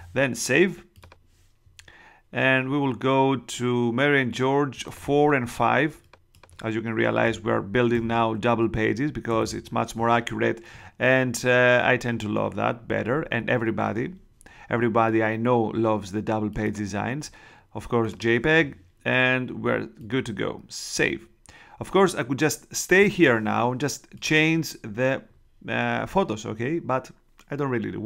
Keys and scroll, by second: 7.2-9.8 typing.